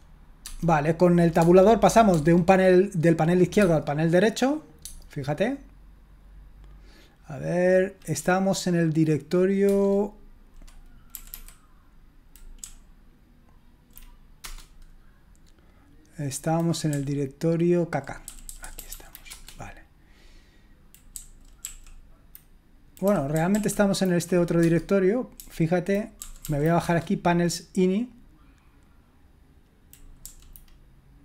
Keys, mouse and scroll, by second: 0.4 Tab, 1.4 Tab, 1.6 typing, 2.1 Tab, 3.6 Tab, 9.6 Return, 11.1 typing, 12.6-13.8 Up, 14.4 Return, 16.9-18.0 Down, 18.2 Down, 18.5 Down, 18.7 Down, 18.9 Down, 19.3 Return, 21.1 Down, 21.6 Right, 23.0 Down, 23.3 Down, 23.5 Right, 24.6 Tab, 25.4-26.1 typing, 26.4 Down, 26.8 Return, 30.2 Down.